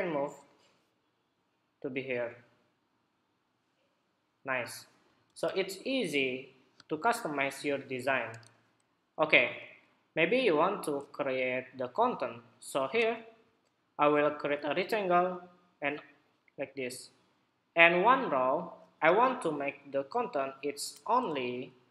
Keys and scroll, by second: 5.0 super+-, 20.9 super+=.